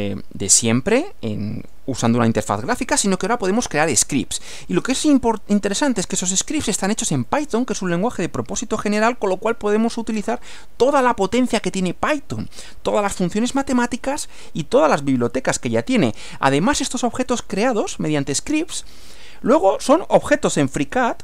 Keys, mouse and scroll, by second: 0.2-1.9 middle drag, 2.7 middle click, 3.7 middle click, 6.3 middle click, 7.3 middle click, 8.2-9.2 middle drag, 9.5-10.7 middle drag, 13.4-15.1 middle drag, 16.7 middle click, 17.3 scroll down 1, 17.5-18.8 middle drag, 19.5 click, 20.4 click.